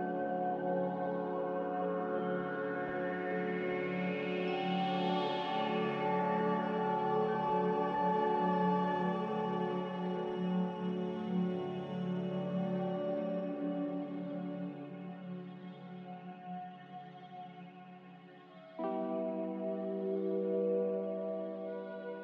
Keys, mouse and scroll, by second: 18.0 z.